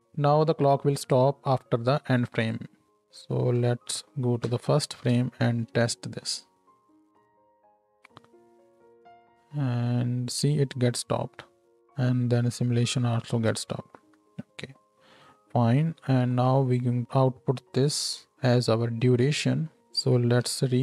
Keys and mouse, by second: 0.0-3.0 middle drag, 0.0-3.0 right drag, 4.1 shift+Right, 4.4 shift+Left, 5.8 space, 10.4 space, 11.6 space, 13.3 space, 16.1 ctrl+h, 17.8-19.5 middle drag, 19.5-20.8 ctrl+drag, 19.8 ctrl+h, 20.4 n.